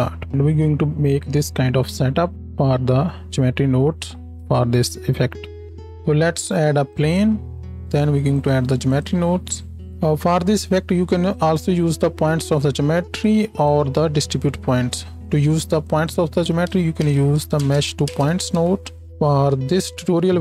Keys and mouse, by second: 5.7 ctrl+shift+s, 6.1 shift+a, 7.2-8.5 drag, 8.5 middle click, 8.9-13.6 drag, 13.6-16.0 middle drag, 14.7 shift+a, 16.0-19.0 drag, 19.0-20.4 middle drag, 20.3 x.